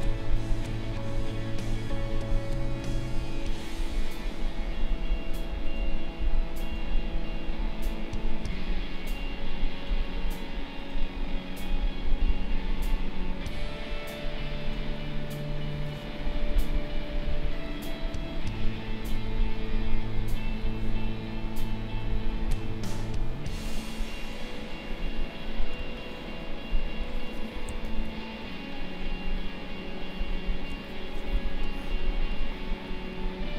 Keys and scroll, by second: 25.7 space, 27.8 ctrl+-, 31.3 space.